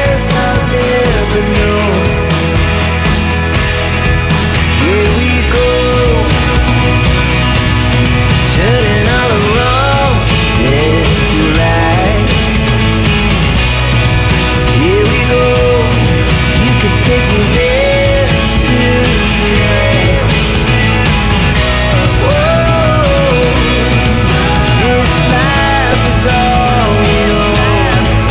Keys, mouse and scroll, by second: 0.3 click, 2.4 click, 3.8 click, 8.6 click, 9.7 5, 11.2 click, 12.7 1, 13.0 5, 14.2 click, 15.1 1, 17.6 click, 21.6 scroll up 1, 23.1-23.5 scroll down 1, 24.9 click, 25.3 double click.